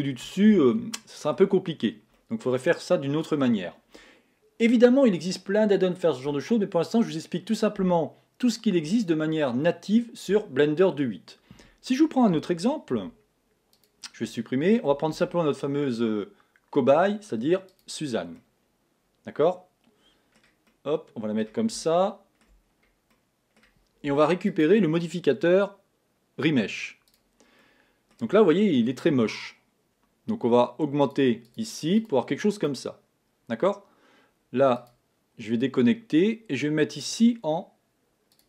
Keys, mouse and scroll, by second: 2.1-2.5 scroll down 1, 2.5-5.5 middle drag, 15.5 shift+a, 19.1-22.8 middle drag, 22.8 scroll up 1, 23.0-23.5 scroll down 3, 23.5-24.9 middle drag, 24.9 click, 28.0 middle click, 28.5-29.0 scroll up 1, 31.4 click, 35.5 click, 37.4 click.